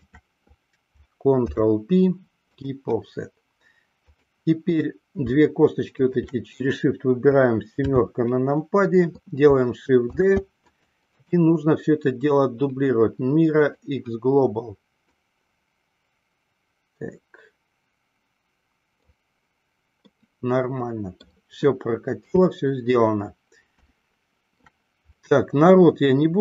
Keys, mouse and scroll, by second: 0.2 shift+click, 1.5 ctrl+p, 6.0 shift+click, 7.9 KP_7, 10.3 shift+d, 10.9 click, 11.4-14.2 right drag, 15.5-19.2 drag, 20.2-21.4 middle drag, 22.3 KP_2, 24.2 shift+middle click, 25.3-26.4 middle drag.